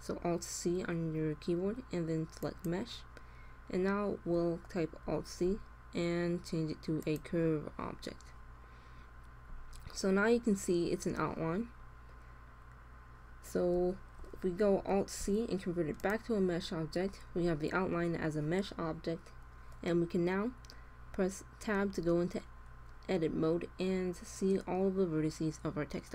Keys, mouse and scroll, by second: 3.5-4.5 drag, 3.6 middle click, 4.9 alt+c, 7.7-9.4 drag, 14.8 alt+c, 17.2-19.1 drag, 21.6 Tab.